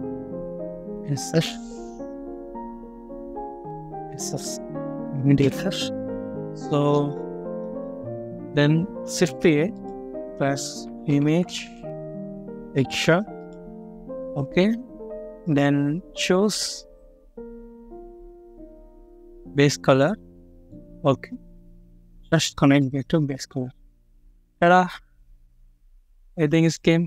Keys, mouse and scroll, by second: 0.0-0.4 typing, 3.1 m, 5.3 Return, 6.4 middle click, 7.0 scroll down 1, 7.4 middle click, 9.1 typing, 10.7-11.4 typing, 13.6-14.1 scroll up 1, 14.1 middle click, 14.5 scroll up 1, 17.3 s, 18.3 typing, 20.1-20.4 scroll down 1, 20.5 middle click, 21.0 scroll down 1.